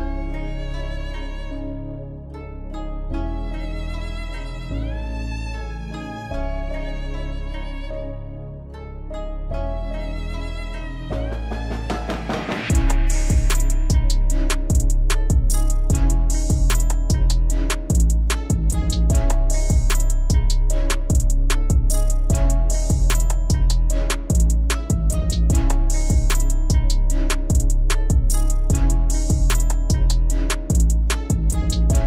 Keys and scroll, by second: 12.9 alt+w, 17.7 F4, 24.8 alt+w.